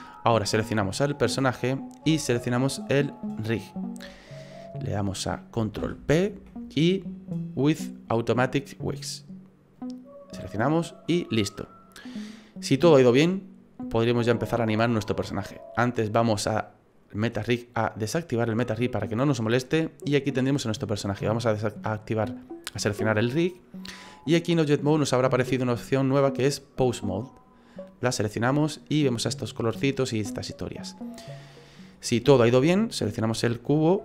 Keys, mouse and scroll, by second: 1.1 right click, 3.1 shift+right click, 5.8 ctrl+p, 11.0 right click, 18.1 click, 19.0 middle click, 19.8 middle click, 21.3 right click, 24.4 click, 29.0 middle click, 31.5 middle click, 32.0-32.4 scroll up 4, 32.4 shift+middle click, 33.3 right click.